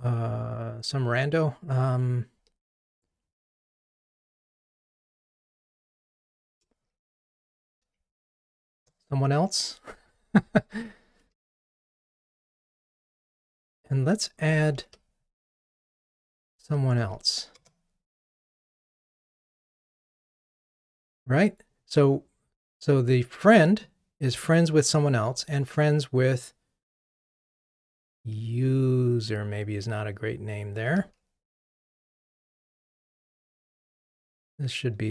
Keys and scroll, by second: 11.3 ctrl+r, 14.9 super+d, 17.1 super+d, 31.9 ctrl+r.